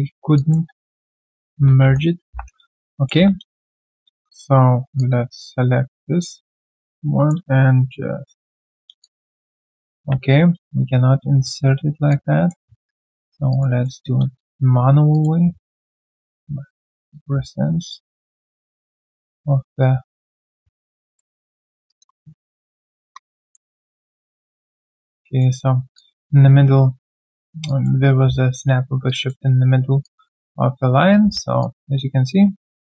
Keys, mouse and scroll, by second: 0.0 alt+right click, 0.3 alt+click, 0.7 right click, 1.3 alt+middle click, 1.5 alt+scroll down 1, 2.0-3.1 typing, 2.6 alt+right click, 2.9 alt+click, 3.5 alt+click, 3.9 alt+right click, 6.7 alt+click, 8.4 ctrl+alt+q, 9.0 alt+click, 9.9 ctrl+z, 12.1 alt+click, 13.5 alt+right click, 13.8 alt+middle click, 15.1 shift+click, 16.2 shift+click, 21.1 alt+click, 21.4 alt+middle click, 23.0 Return, 23.5 alt+click, 25.2 alt+middle click, 25.9 alt+click, 27.0 alt+click, 27.4 alt+middle click, 27.6 alt+click, 29.0 alt+click, 30.0 alt+click, 31.2 q, 31.6 alt+click.